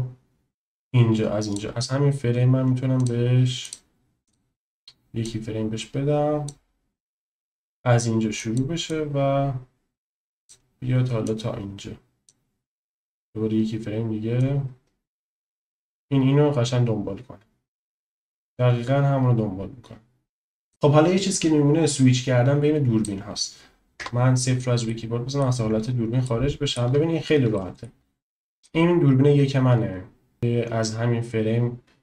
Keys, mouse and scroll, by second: 3.3 click, 3.9 click, 4.5 click, 5.3-6.7 drag, 7.2-8.6 drag, 9.0-10.7 drag, 11.3-12.4 drag, 12.9 click, 14.5-18.7 drag, 18.7-20.7 middle drag, 22.2-23.2 drag, 24.0 KP_0, 24.9 middle drag, 25.1 click, 26.2 shift+click, 26.4-26.7 shift+middle drag, 27.5 shift+middle drag, 28.5 click, 30.3-32.0 drag.